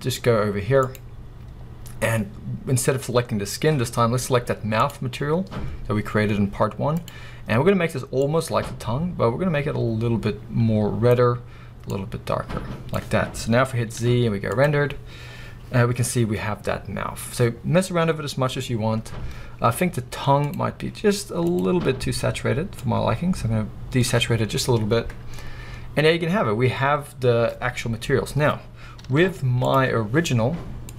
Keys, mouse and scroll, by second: 13.6-13.9 scroll down 2, 14.7 z, 20.5 click, 29.8 z.